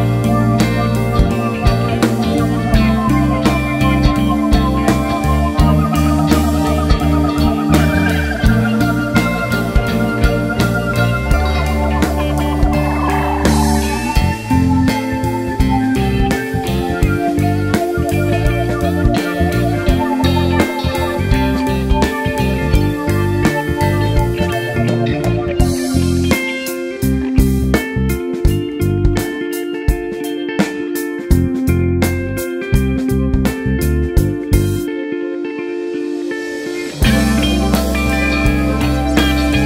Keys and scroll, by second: 1.0 ctrl+space, 1.5 ctrl+space, 18.5 Return, 18.5 typing.